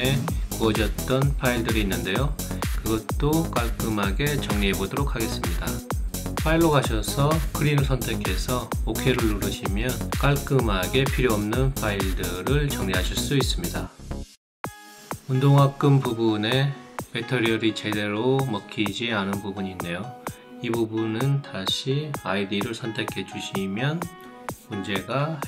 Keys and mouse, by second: 1.9 click, 4.6-5.3 drag, 6.7 click, 7.9 click, 8.8 click, 14.2 click.